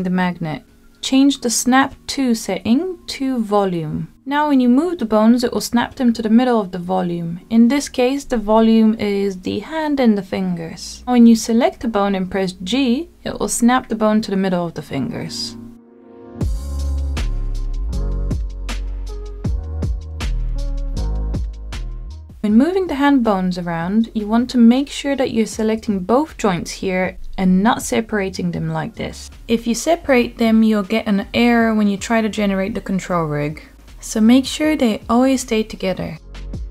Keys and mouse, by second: 5.6 g, 7.0 click, 7.4-8.6 middle drag, 8.7 g, 11.5 click, 12.1 g, 13.5 click, 14.3 click, 14.8 g, 15.9-16.4 drag, 16.4-17.9 middle drag, 17.9 g, 19.1 click, 19.6 middle click, 20.5-22.3 drag, 22.3 middle click, 23.3 click, 26.0 g, 27.1 click, 32.1 ctrl+z, 32.6-33.6 drag, 34.9 g.